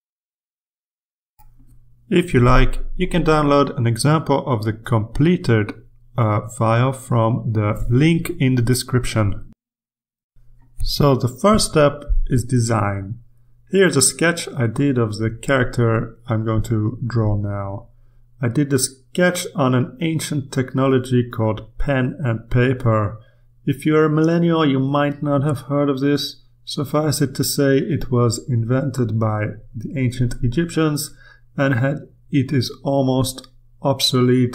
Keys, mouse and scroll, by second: 0.9 click, 1.7 click, 2.6-6.0 drag, 6.5 ctrl+z, 7.0 ctrl+click, 9.3-11.6 drag, 11.9 click, 14.6 ctrl+r, 19.4 click, 21.3 click, 22.3 click, 24.6 click, 26.2 click, 28.5 ctrl+click, 30.0 ctrl+click, 31.1-33.2 drag, 33.6 ctrl+click.